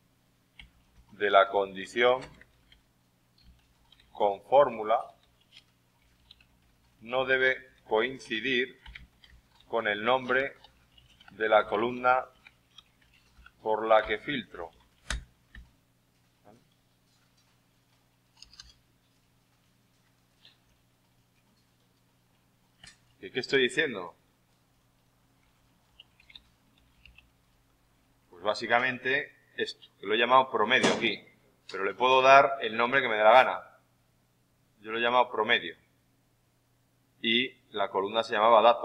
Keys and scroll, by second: 20.6 alt+Tab, 25.9-27.6 typing.